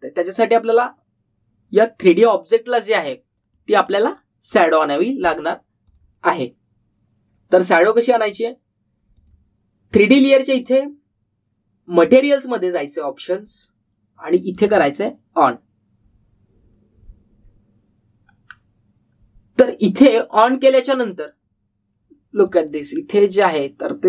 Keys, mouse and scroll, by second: 3.7-4.5 scroll up 1, 4.5-5.0 middle click, 5.5 click, 9.2 click, 15.5 click, 19.5 scroll down 1, 22.2 scroll up 1, 23.4 click, 23.9-24.0 scroll down 1.